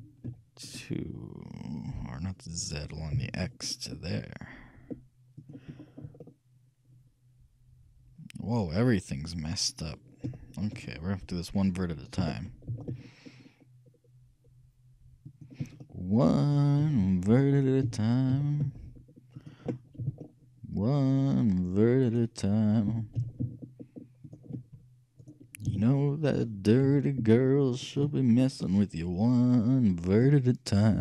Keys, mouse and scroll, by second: 5.9 middle click, 6.5-8.1 middle drag, 10.4-12.7 shift+middle drag, 11.8-13.5 shift+right drag, 12.2 shift+g, 16.0-17.6 middle drag, 16.9 a, 17.1 c, 17.9 g, 20.1 a, 20.3-22.0 middle drag, 22.9 right click, 22.9 g, 25.3-27.0 right drag, 25.7 g, 28.3-30.5 middle drag.